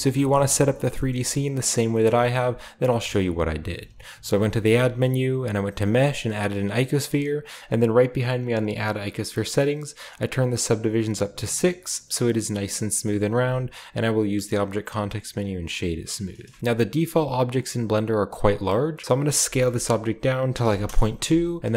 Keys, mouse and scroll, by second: 0.0-2.6 typing, 0.2-1.8 scroll down 1, 0.6-2.1 shift+middle drag, 4.3 typing, 6.4-7.9 drag, 8.1-10.0 drag, 10.1 click, 10.4 click, 10.8 click, 11.2-12.9 drag, 11.6-13.5 typing, 13.1-15.3 middle drag, 13.1-15.3 scroll up 1, 15.3-16.5 drag, 18.9-20.6 middle drag, 18.9-20.6 scroll up 1, 19.4 s, 20.6-21.7 typing, 20.8 Return, 21.4-21.7 scroll up 1.